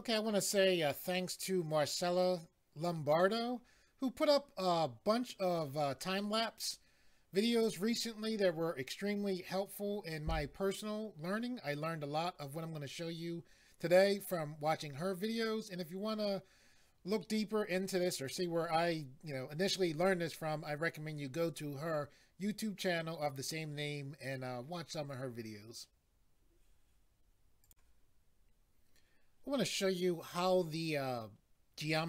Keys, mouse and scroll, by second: 27.6 click.